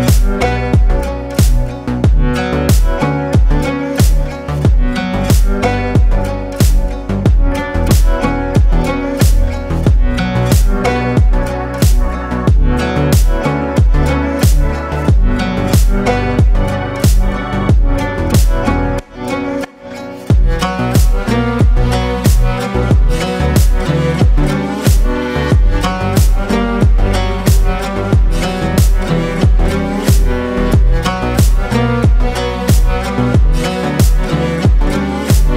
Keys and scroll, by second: 15.2 ctrl+space.